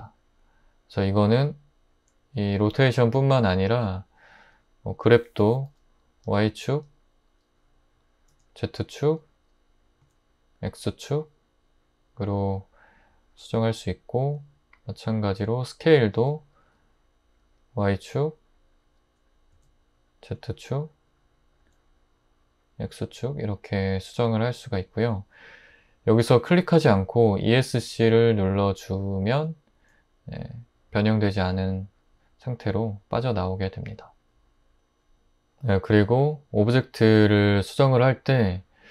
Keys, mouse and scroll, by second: 5.7 g, 6.2 y, 8.3 z, 10.0 x, 16.2 s, 16.6 y, 19.5 z, 21.6 x, 29.4 ↺.